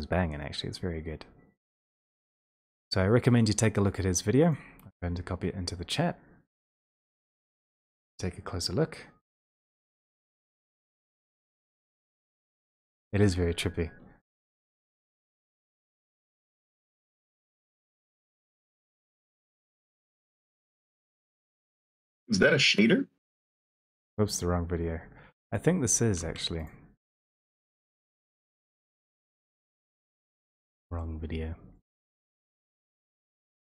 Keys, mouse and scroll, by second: 2.4 click, 4.6 click, 4.8 ctrl+c, 7.0 click, 7.6 click, 10.6 click, 11.6 ctrl+v, 11.6 click, 12.4 Return, 16.7 click, 16.9 ctrl+a, 17.7 ctrl+c, 18.8 ctrl+v, 18.8 click, 20.4 Return, 20.4 click, 22.3 click, 24.7 click, 27.2 ctrl+c, 27.2 click, 28.2 ctrl+v, 28.2 Return, 30.5 click, 32.6 click.